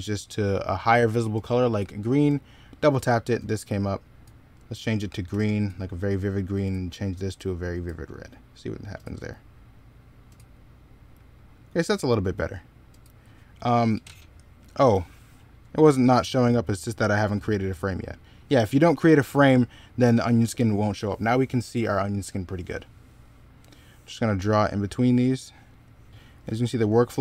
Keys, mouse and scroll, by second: 15.0 middle click, 17.7 middle click, 25.9 b.